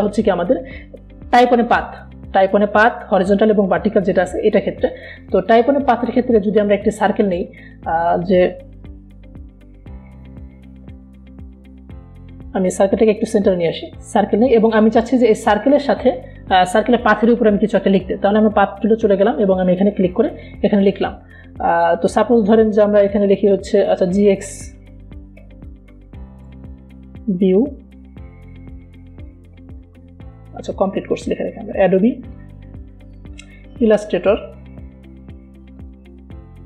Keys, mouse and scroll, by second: 1.4 right click, 6.8 click, 8.4 right click, 9.3 click, 12.0 v, 12.4-14.2 drag, 19.3 right click, 19.3 right click, 20.1 click, 25.5-27.9 typing, 30.5-31.6 typing, 33.1-36.6 typing.